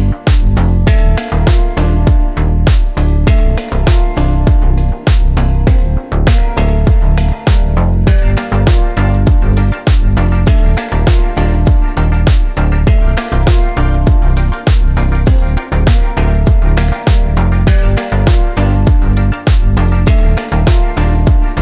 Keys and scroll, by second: 5.8 Left, 6.2 KP_0, 6.6 KP_2, 8.5 Delete, 9.3 Return, 15.3 3, 15.8 Return.